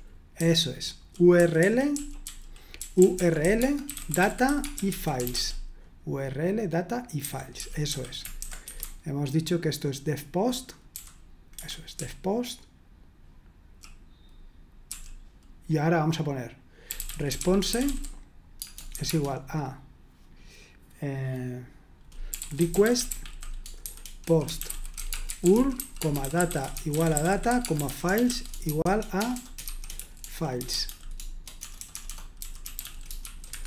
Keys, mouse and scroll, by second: 0.2-0.9 typing, 2.5-4.7 typing, 7.2 Escape, 7.3-12.7 typing, 8.6 Escape, 11.5 Escape, 14.9 typing, 16.6-19.4 typing, 22.0-33.6 typing.